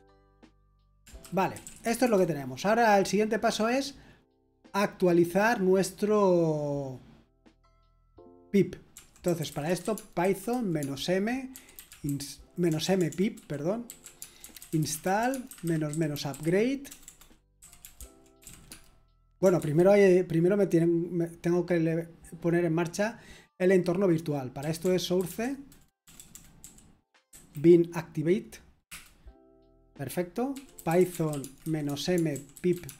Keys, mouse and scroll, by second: 1.8-2.5 typing, 9.0-10.4 typing, 11.7 typing, 12.9-18.9 typing, 19.6 ctrl+c, 27.0-27.8 typing, 30.3-32.9 typing.